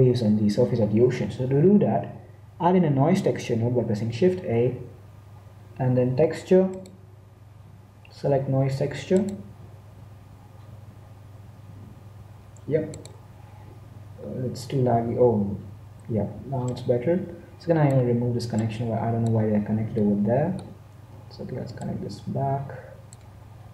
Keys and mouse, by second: 4.6 shift+a, 13.8 click, 14.9 z, 15.4 z, 15.6 z, 16.9-18.7 drag, 19.0-20.5 drag, 20.5 middle click, 22.0 middle click, 22.2-23.7 drag.